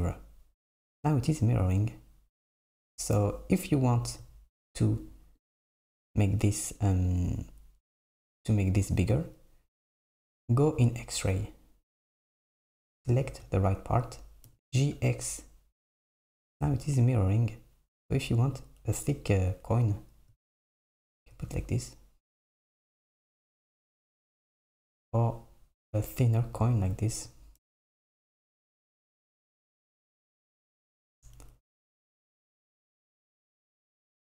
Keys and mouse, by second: 3.2 KP_7, 3.8 Tab, 5.5 click, 7.2 click, 9.9 click, 12.2 click, 14.5 g, 19.7 Tab, 22.4 Tab, 23.9-26.6 right drag, 23.9 g, 27.6 KP_7, 28.9 Tab, 31.1 KP_7, 31.9 Tab, 32.3 g.